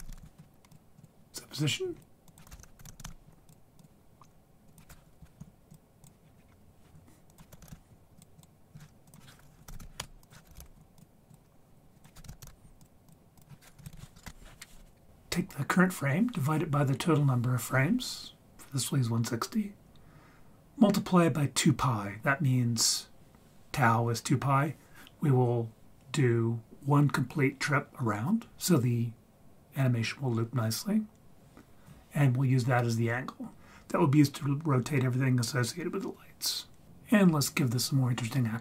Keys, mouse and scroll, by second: 1.9 scroll up 1, 2.0 click, 2.3-3.8 drag, 4.7-6.1 drag, 6.2-7.3 scroll down 3, 6.3-7.3 scroll up 1, 7.3-8.4 drag, 7.3 scroll up 4, 9.1 click, 10.2 ctrl+z, 10.2-11.3 drag, 11.9 click, 13.3 click.